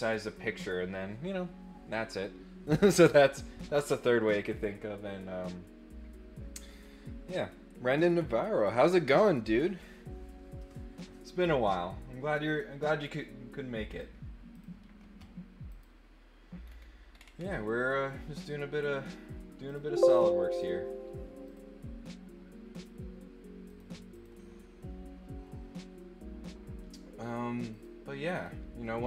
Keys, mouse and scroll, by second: 13.9 click, 14.5 click, 15.7 click, 16.6 scroll down 1, 17.0-17.4 scroll up 4, 19.6 click, 20.5 click, 21.4 click, 22.7 click, 23.6 click, 24.1 click, 27.7 click, 28.3 click.